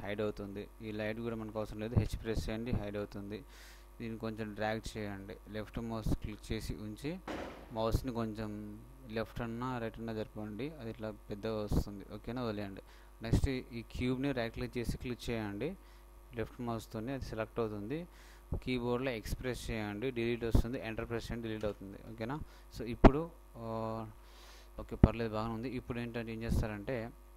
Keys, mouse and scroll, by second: 0.0 h, 1.1-2.7 right drag, 2.4 h, 6.3-8.3 drag, 14.1-16.1 right drag, 19.2 x.